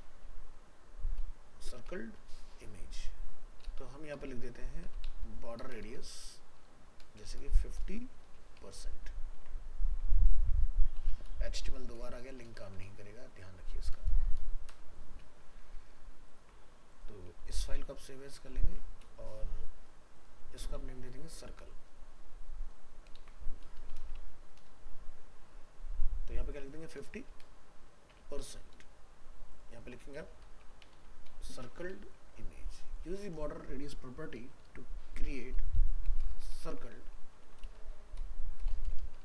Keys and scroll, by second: 9.4 ctrl+s, 15.6 ctrl+s, 17.3 alt+f, 17.3 alt+移, 18.7 ctrl+Tab, 23.2 ctrl+shift+Left, 36.7 ctrl+shift+Left.